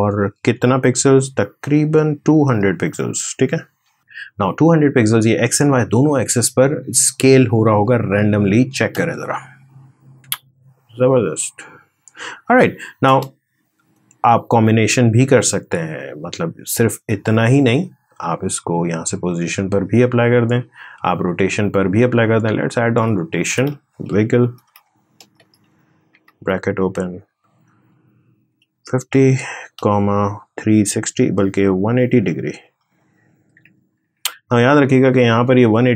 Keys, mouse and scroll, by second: 2.1-3.6 typing, 12.8 space, 13.7-22.1 drag, 23.7-25.9 typing, 28.0-29.6 typing, 31.9-34.1 typing.